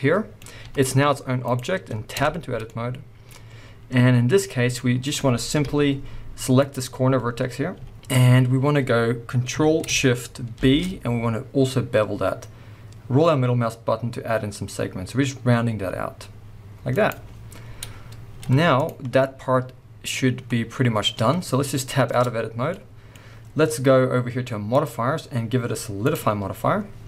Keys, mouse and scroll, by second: 0.6 g, 1.5 right click, 2.1 Tab, 2.6 middle click, 3.3-4.7 scroll up 2, 4.7 middle click, 5.5 KP_1, 6.6 click, 7.1 scroll up 1, 7.7 z, 7.9 shift+middle click, 10.5 ctrl+shift+b, 17.1 click, 17.6-18.3 scroll down 1, 18.3 z, 19.0 scroll down 1, 19.2-24.8 middle drag, 20.2-22.1 scroll up 2, 22.1 Tab, 24.8-27.0 drag, 26.5-27.0 scroll up 2.